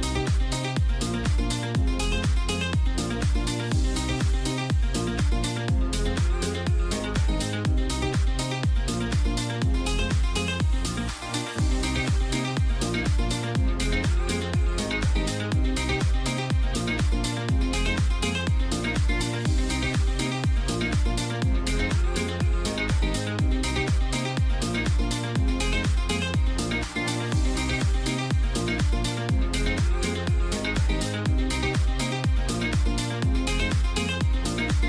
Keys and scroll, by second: 7.9 [.